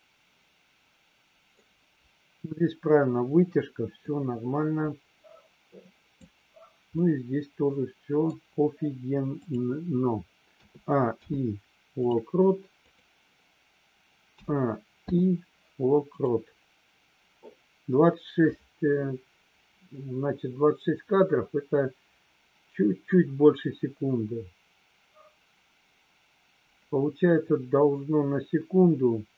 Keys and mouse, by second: 4.1-6.3 drag, 7.1-8.2 middle drag, 9.3 click, 11.1 i, 12.8 click, 15.1 i.